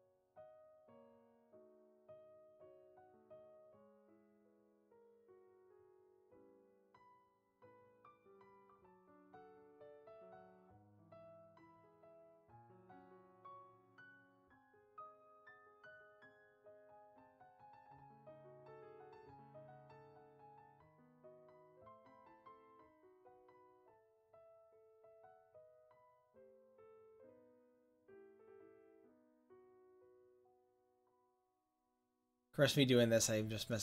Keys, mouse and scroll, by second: 2.7-7.6 drag, 7.6 middle click, 8.8-10.5 drag, 15.8-16.3 drag, 16.3-16.7 middle drag, 21.2-22.3 drag, 25.3-33.8 drag.